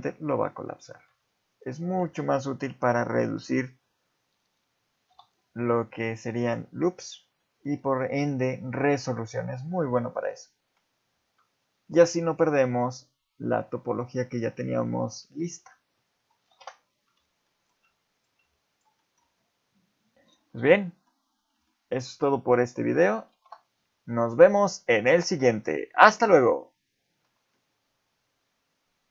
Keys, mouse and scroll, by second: 0.5 scroll down 2, 1.5 alt+click, 1.8 scroll up 1, 2.1 shift+middle click, 5.1 x, 7.4 shift+middle click, 8.7-9.0 scroll down 4, 9.0-10.6 scroll up 4, 11.8 scroll up 1, 12.1 shift+middle click, 14.9 shift+middle click, 15.2-15.6 scroll down 3, 15.6 Tab, 16.5 Delete, 17.5 shift+middle click, 18.1 click, 18.7 shift+click, 19.0 shift+middle click, 20.4 scroll up 5, 20.8 middle click, 21.3-21.7 scroll up 2, 21.7 shift+middle click, 22.5 click, 23.3 Delete, 24.4 shift+middle click, 24.7 scroll up 2.